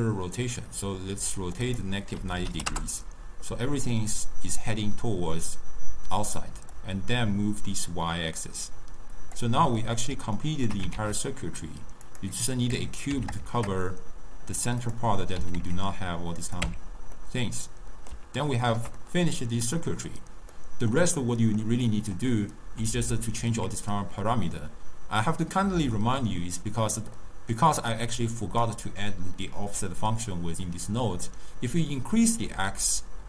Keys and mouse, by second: 6.9-9.9 drag, 9.9-11.0 middle drag, 11.0 shift+a, 12.3 shift+a, 12.8 Tab, 13.2 s, 15.5 s, 16.7 Tab, 17.3-25.0 middle drag, 25.5-28.1 middle drag, 28.1 click, 31.4-33.2 drag.